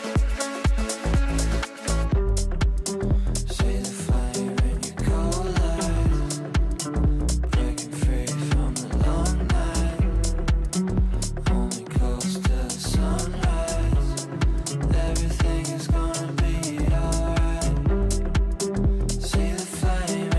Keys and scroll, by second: 4.8 b, 5.3 Down, 14.9 b, 15.6 c.